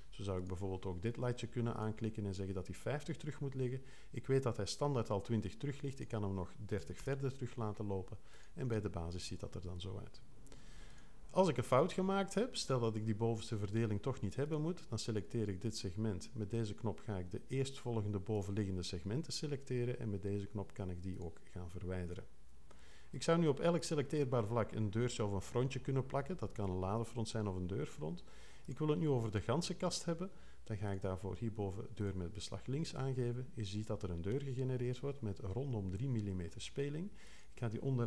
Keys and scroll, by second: 6.5-7.5 typing.